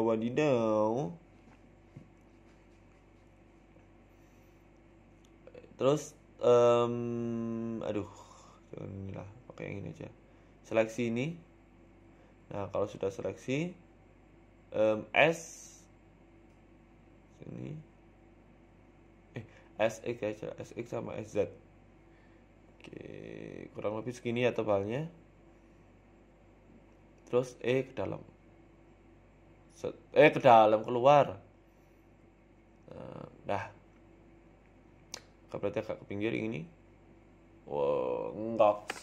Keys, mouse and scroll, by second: 0.1 middle click, 0.9 middle click, 1.4 scroll up 3, 2.0 right click, 2.4 KP_1, 2.6 Tab, 2.9-3.2 scroll up 1, 3.2-4.0 scroll down 1, 5.3 click, 6.1-6.4 scroll down 1, 6.4 click, 7.1 middle click, 7.5 a, 7.6 a, 8.1 alt+shift+Right, 10.9 click, 11.4 a, 11.5 a, 11.8 alt+shift+right click, 14.3 KP_1, 14.8 scroll up 2, 15.1 shift+middle click, 16.0-16.3 scroll up 1, 16.0 e, 16.3 s, 20.2 s, 21.0 s, 23.8 s, 25.8 scroll down 1, 26.5 scroll down 1, 26.5 a, 26.6 a, 26.8 alt+shift+right click, 27.6 ctrl+z, 27.8 middle click, 28.4 alt+shift+right click, 28.7 middle click, 30.2 alt+shift+Right, 30.7 e, 32.4 Tab, 32.5 scroll down 3, 32.7 middle click, 33.4-33.9 scroll down 3, 33.6 middle click, 34.0 middle click, 34.2 scroll up 1, 34.8 scroll up 1, 34.8 KP_1, 35.0 z, 35.8 right click, 36.2 shift+right click, 36.9 g, 38.9-39.0 scroll down 2.